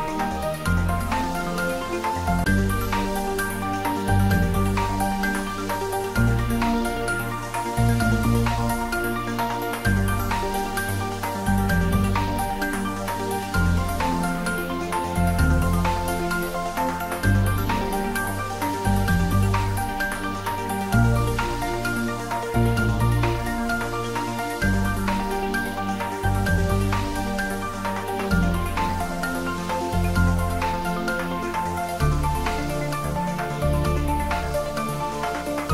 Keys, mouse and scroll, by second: 1.3 click, 1.9 Tab, 2.4 middle click, 3.3-3.9 scroll up 1, 3.9 middle click, 4.6 right click, 5.4 click, 6.0-8.8 middle drag, 8.8 scroll down 1, 9.2 click, 9.8 Tab, 10.0 click, 11.2 x, 11.5 click, 12.4-14.5 middle drag, 14.7 ctrl+z, 15.2 right click, 15.9 click, 16.7 x, 17.8 click, 18.7-19.6 middle drag, 22.0 Tab, 23.5 click, 24.0 shift+z, 24.6-26.8 scroll down 2, 26.8 click, 28.2 a, 31.1 click, 31.6 scroll down 1, 33.6-35.5 middle drag.